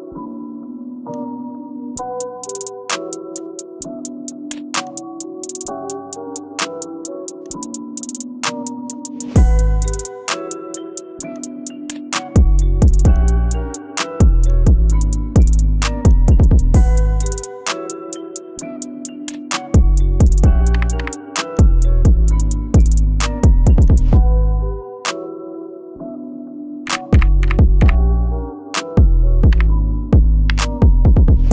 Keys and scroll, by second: 20.8 7, 26.9-27.7 typing, 29.5 e.